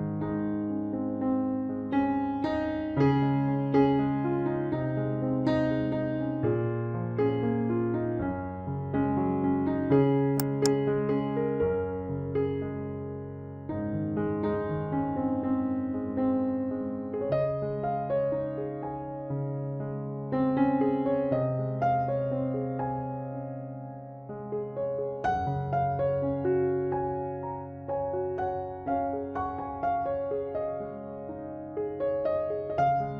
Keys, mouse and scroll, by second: 0.2-2.0 right drag, 1.7 middle click, 2.8 b, 5.3-7.1 drag, 6.8 right click, 7.1 b, 8.1 KP_Decimal, 11.3 ctrl+r, 12.6-14.4 right drag, 13.5 b, 14.0 b, 15.1 e, 17.2-19.1 drag, 18.6-21.3 right drag, 18.8 b, 19.1 g, 20.4 b, 20.7 g, 21.8 b, 22.2 g, 24.8-26.3 middle drag, 24.8 b, 26.0 e, 26.9 right click, 27.1 b, 28.0 g, 29.2 b, 29.6 g, 31.7 b, 32.2 g.